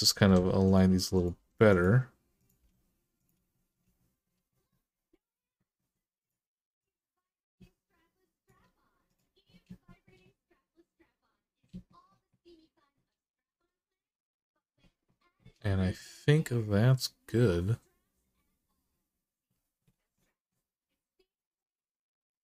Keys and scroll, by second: 1.2 g, 2.4 g.